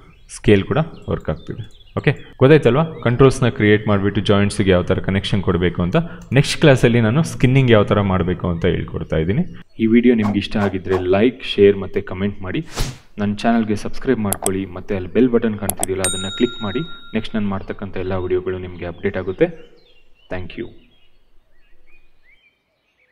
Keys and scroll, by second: 0.4 ctrl+z.